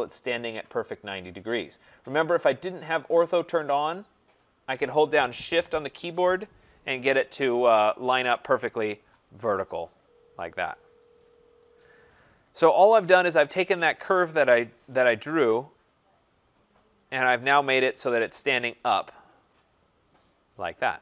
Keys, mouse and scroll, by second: 2.8 click, 8.8 shift+click, 9.9-10.5 scroll, 12.6 right click, 12.8-13.2 scroll, 17.4 right click, 19.1-21.0 right drag.